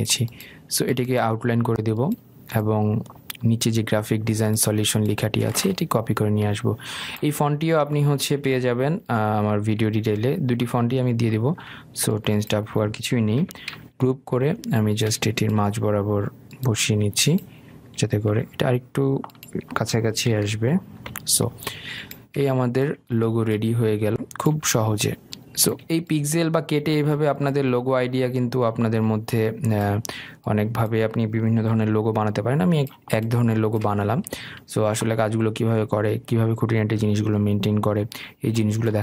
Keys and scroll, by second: 14.7 ctrl+g, 21.7 shift+Left, 32.9 ctrl+g.